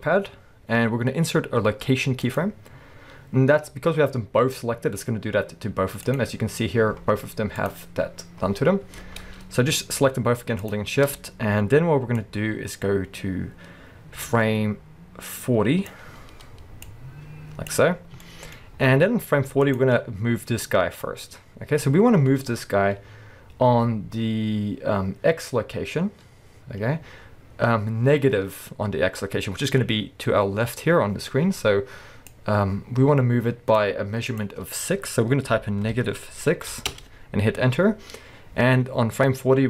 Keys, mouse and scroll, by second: 6.1 click, 7.6 click, 10.6 shift+click, 12.2-18.2 drag, 18.0 scroll down 1, 18.2-19.7 shift+middle drag, 18.7 scroll up 1, 19.7 click, 20.1-21.1 scroll up 1, 21.1-24.1 scroll down 1, 32.3-39.6 drag, 37.0 Return.